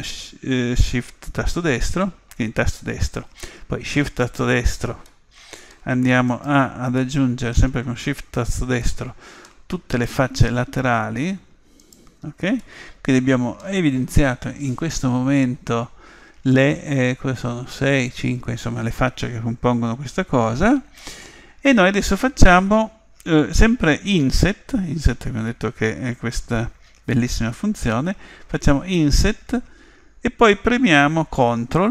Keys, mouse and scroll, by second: 4.3-6.0 right drag, 5.1-6.9 middle drag, 6.3-7.9 right drag, 7.9-12.3 middle drag, 8.6-11.7 right drag, 12.1-13.5 right drag, 12.6-14.5 middle drag, 19.0-22.0 middle drag, 28.9 i.